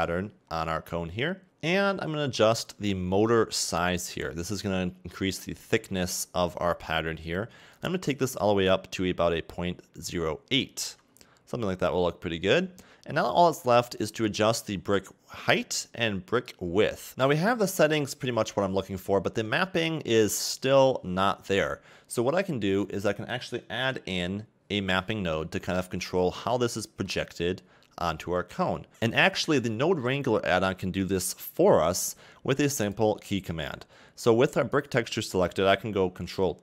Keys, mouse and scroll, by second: 0.0-0.3 scroll up 1, 0.5-1.5 scroll up 1, 1.5 click, 8.1 shift+click, 14.7 shift+click, 16.9 shift+click, 17.1-19.5 scroll up 3, 19.5 middle click, 26.0 scroll down 3, 26.3-26.8 scroll up 4, 26.8 middle click, 27.9-28.9 scroll down 1, 32.9 click, 34.7 click.